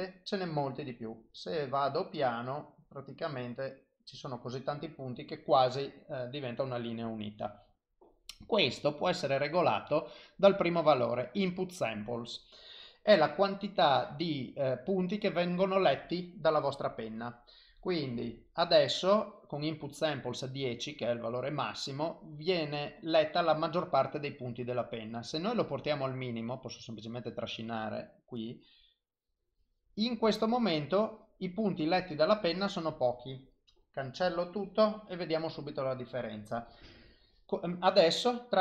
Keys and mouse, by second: 0.9 click, 9.7 click, 17.1 click, 20.9 click, 26.5 click, 28.4 click, 31.8 click, 32.4 click, 34.3 b.